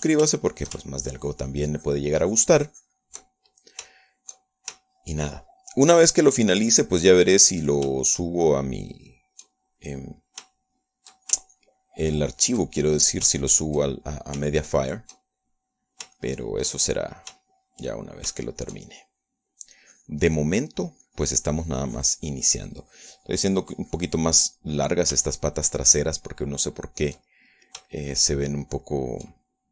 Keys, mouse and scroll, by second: 0.9 ctrl+middle click, 1.6 ctrl+shift+middle click, 2.3-4.6 ctrl+shift+drag, 4.7 ctrl+middle click, 5.7 ctrl+shift+middle click, 7.1 shift+middle click, 8.8-10.3 shift+middle drag, 10.4 shift+middle click, 11.3 middle click, 11.9 shift+middle click, 12.9-14.0 ctrl+shift+drag, 14.0 ctrl+middle click, 15.9-17.4 shift+middle drag, 17.5 shift+middle click, 18.5-20.8 shift+middle drag, 21.1-22.2 drag, 22.4-25.9 drag, 25.9 middle click, 26.6 shift+middle click, 27.9 shift+middle click, 28.6-29.7 shift+middle drag.